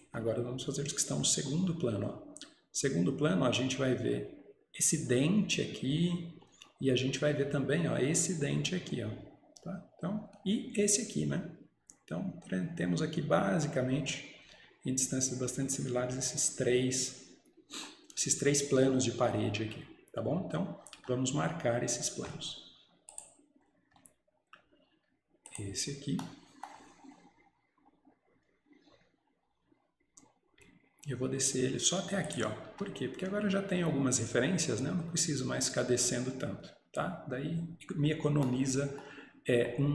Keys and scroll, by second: 32.8 Escape.